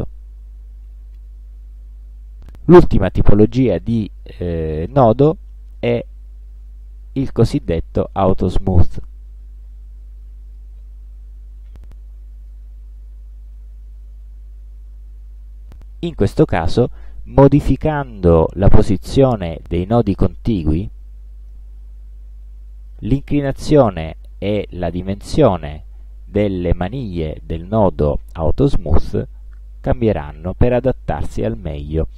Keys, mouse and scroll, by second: 10.6 click, 17.3-19.6 drag, 20.5-23.2 drag, 25.5-27.4 drag, 28.3-29.8 drag.